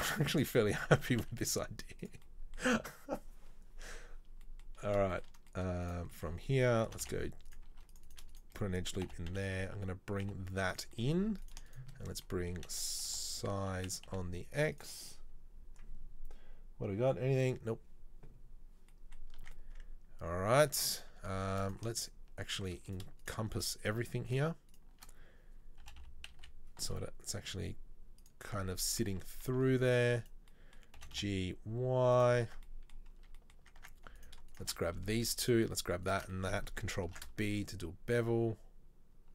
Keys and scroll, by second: 0.4 e, 1.2 s, 6.9 g, 7.9 ctrl+r, 9.1 g, 12.6 s, 19.6 Tab, 21.2 Tab, 25.9 g, 29.1 Tab, 29.7 Tab, 31.1 g, 32.7 Tab, 33.9 Tab, 37.2 ctrl+b.